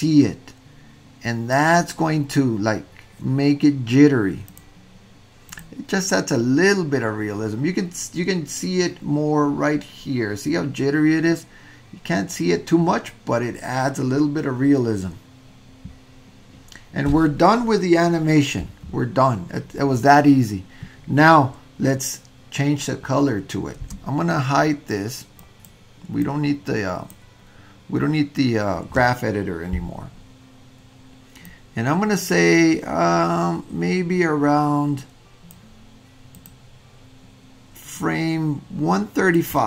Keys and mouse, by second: 1.1 click, 4.5-5.7 drag, 24.0 space, 25.4 click, 26.2 click, 26.7 click, 31.6-35.6 drag, 38.1-39.5 drag.